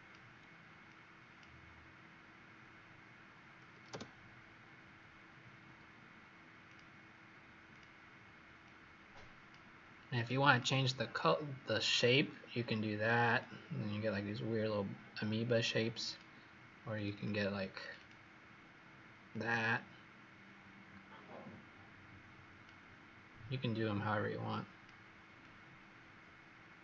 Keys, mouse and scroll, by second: 6.6 click, 10.4 click, 11.8-13.3 scroll down 2, 13.3 click, 17.0 click, 17.7 click, 17.9 click, 19.3 click.